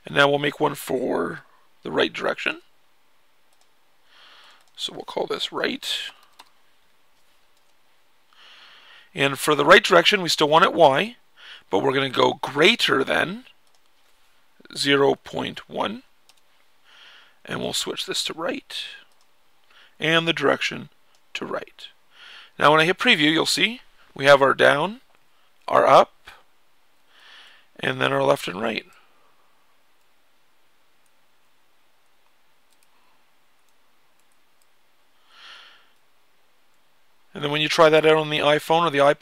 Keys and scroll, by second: 5.2-6.7 typing, 14.3-15.7 typing, 24.1 Down, 24.6-37.4 typing, 24.7 Down, 24.8 Down, 24.8 Down, 25.7 Up, 25.8 Up, 25.9 Up, 37.5 Up, 38.1 Up, 38.2 Left, 38.7-39.2 typing.